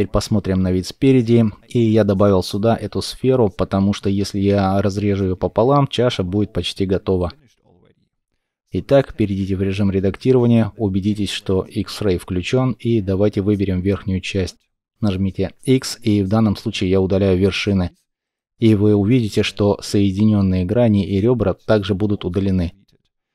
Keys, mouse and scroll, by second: 0.7 shift+middle click, 8.6 Tab, 15.2 x.